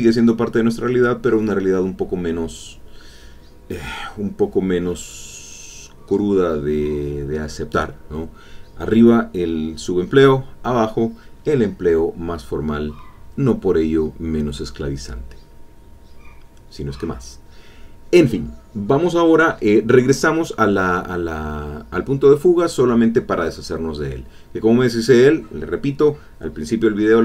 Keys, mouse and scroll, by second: 0.4 ctrl+click, 6.4 click, 6.9 ctrl+click, 7.1 ctrl+middle click, 7.4 ctrl+middle click, 16.4 middle click, 17.5 click, 18.3 middle click, 22.1 click, 23.2 click, 23.8 middle click, 24.7 ctrl+middle click, 25.3 ctrl+middle click.